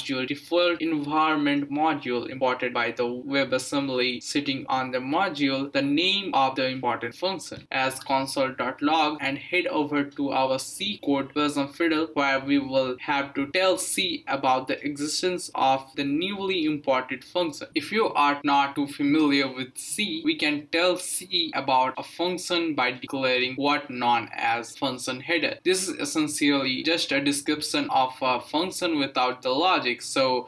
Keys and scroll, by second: 0.0-3.0 typing, 1.4 Return, 3.4 Down, 4.4 Return, 4.7 typing, 6.9-11.3 typing.